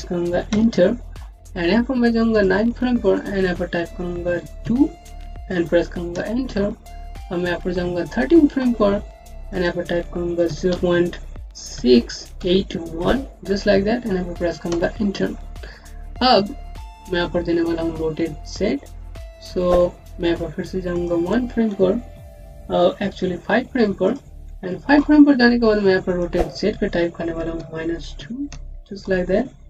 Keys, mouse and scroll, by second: 0.4 KP_Enter, 2.2 click, 5.4 KP_2, 6.0 KP_Enter, 8.0 click, 10.3 KP_0, 10.6 KP_Decimal, 13.4 KP_1, 14.6 KP_Enter, 20.8 KP_Enter, 23.1 click, 23.9 click, 25.9 click, 28.7 KP_Enter.